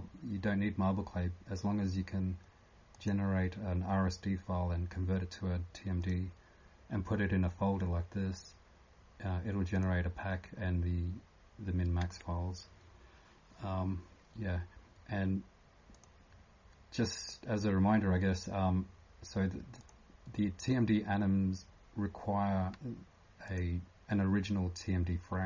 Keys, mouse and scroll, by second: 2.9 click.